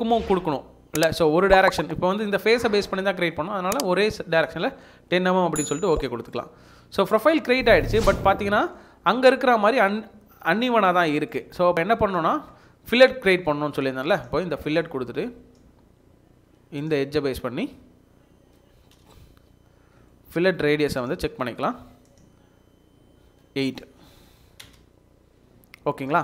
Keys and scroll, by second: 24.3 8, 24.6 Return.